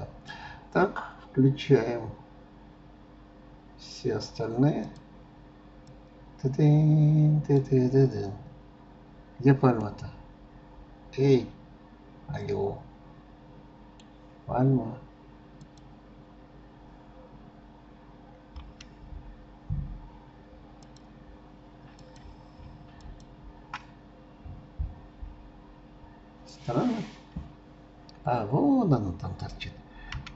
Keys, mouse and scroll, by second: 4.8 click, 5.9-8.4 drag, 8.4-8.8 scroll down 6, 9.9-12.9 middle drag, 15.6-16.1 drag, 20.8 click, 22.0 click, 23.0 shift+click, 24.2 scroll down 1, 25.6 scroll down 3, 25.7 scroll up 2.